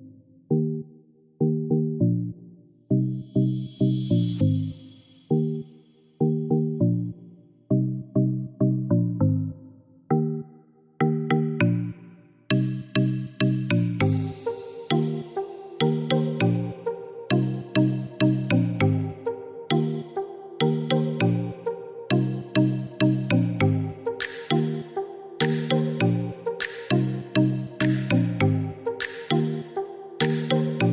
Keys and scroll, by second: 1.2 4, 1.7 0, 2.1 Return, 9.4-10.2 typing, 24.4 5, 24.8 Return.